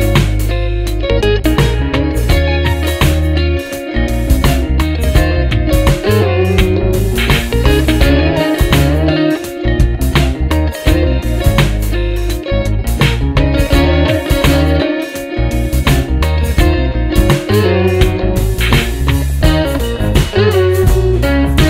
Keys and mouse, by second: 0.1 space, 7.1 s, 12.2-13.3 typing, 13.7 right click, 17.1 alt+click, 20.8 alt+click.